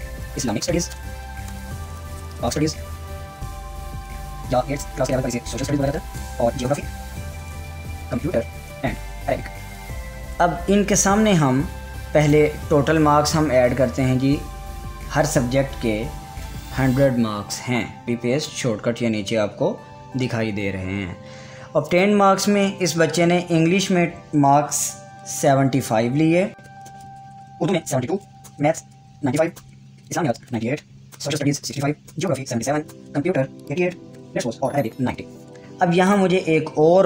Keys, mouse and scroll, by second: 0.0-10.3 typing, 4.7 Up, 4.8 Right, 12.8 click, 16.4-17.6 typing, 18.0 Down, 18.4 ctrl+v, 22.4 click, 26.5-31.2 typing, 31.2 Down, 33.4 Down, 34.2 8, 34.8 Down, 35.6-36.4 typing, 36.6 click.